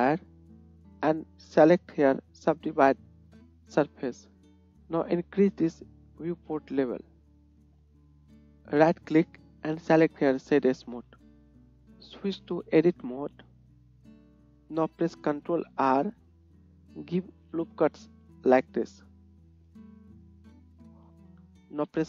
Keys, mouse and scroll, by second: 7.5 KP_1, 8.2-12.8 drag, 15.5 ctrl+click, 15.5 ctrl+middle click, 15.5 ctrl+right click, 16.0 ctrl+r, 18.3 click, 18.3 middle click, 18.3 right click, 18.9-20.3 scroll up 1, 20.3 scroll up 1, 20.4-22.0 drag.